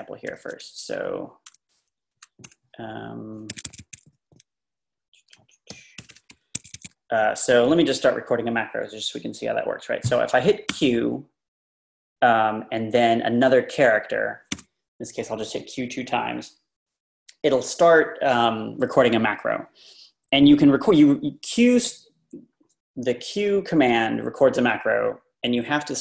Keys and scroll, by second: 0.3 i, 1.9 o, 2.5 BackSpace, 3.5 Escape, 3.6 Escape, 3.8 Escape, 5.7 i, 5.9 Return, 6.1 Return, 6.3 Up, 6.5 Escape, 6.7 Escape, 10.7 q, 14.6 q.